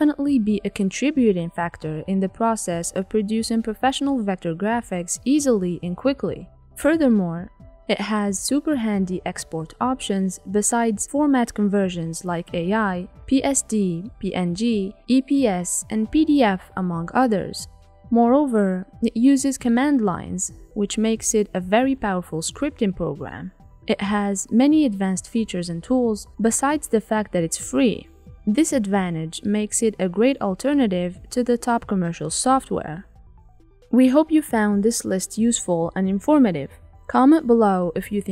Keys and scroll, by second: 0.4 shift+F6, 2.2 F1, 2.8 ctrl+*, 4.5 F7, 5.0 F1, 6.1 F7, 6.4 F1, 9.5 F1, 13.2 shift+F6, 16.7 F1.